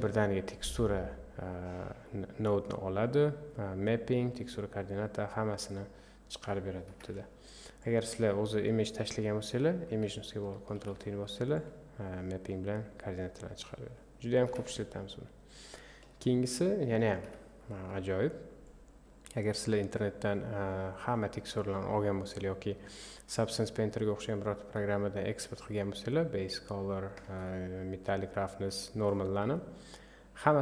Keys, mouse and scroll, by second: 0.0 click, 5.6 click, 6.9 Delete, 7.8-10.7 drag, 10.7 ctrl+t, 11.6 click, 13.2 click, 13.6 click, 14.4 Delete, 16.4 click, 17.3 Delete, 18.7 click, 20.7-26.6 drag.